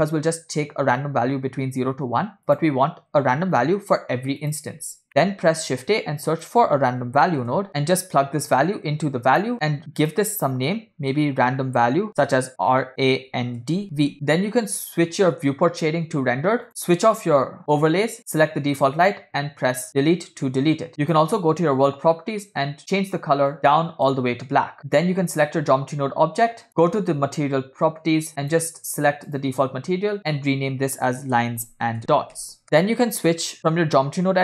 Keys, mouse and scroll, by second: 2.6-4.8 drag, 5.1 middle click, 5.4 shift+a, 8.6-9.5 drag, 10.1-14.1 drag, 12.9 BackSpace, 16.8 drag, 18.3 click, 19.9 Delete, 21.2 click, 22.4 click, 24.8 click, 26.7 click, 28.6-29.8 drag, 30.2-32.6 drag, 32.8-34.4 drag.